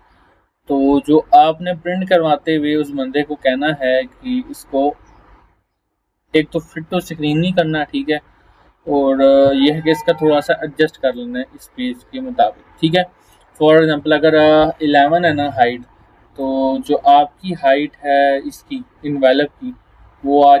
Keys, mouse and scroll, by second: 11.1-11.7 drag, 16.6-17.6 drag.